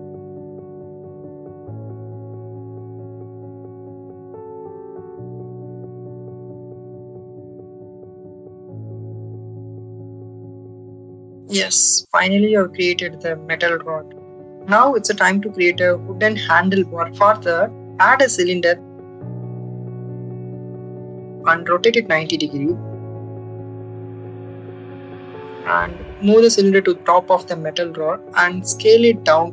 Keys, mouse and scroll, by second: 2.0 click, 2.3 click, 3.0 click, 3.4 click, 3.7-4.8 drag, 5.1 click, 5.7 click, 6.4 click, 7.0-8.5 drag, 8.9 click, 10.0 click, 11.7-13.0 drag, 17.0 shift+a, 17.2 Tab, 18.0 shift+a, 22.4 y, 22.6 9, 22.8 0, 23.2 click, 24.3 ctrl+z, 24.7 Tab, 26.1-28.1 drag.